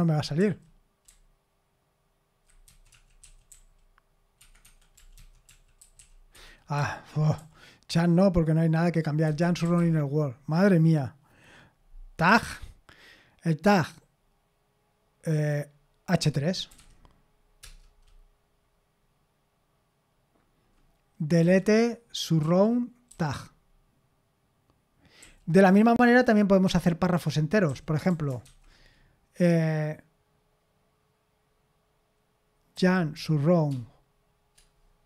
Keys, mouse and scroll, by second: 1.1-3.5 typing, 4.4 Escape, 4.6 Escape, 4.7-7.4 typing, 9.0-10.3 typing, 12.3 typing, 16.4-17.3 typing, 17.6 Return, 21.4-23.1 typing, 25.2-25.6 typing, 27.4-28.9 typing, 32.7-33.1 typing.